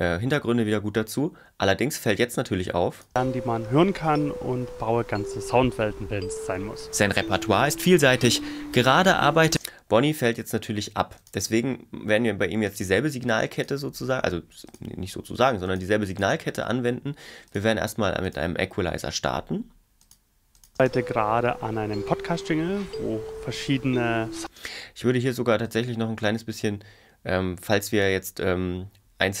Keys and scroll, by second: 3.1 space, 9.5 space, 20.8 space, 24.5 space.